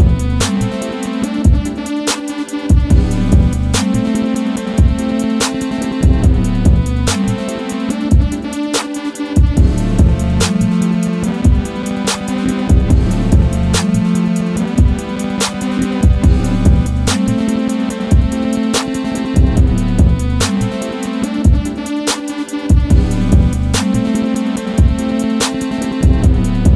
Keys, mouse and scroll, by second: 1.2 right click, 3.5-6.1 drag, 8.2-23.9 drag, 23.9-26.7 drag.